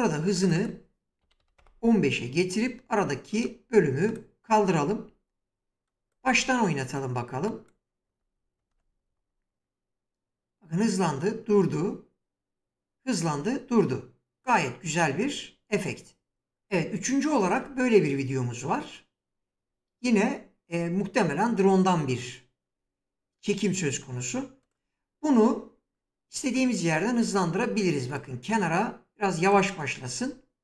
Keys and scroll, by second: 0.7-1.6 typing, 8.4 space.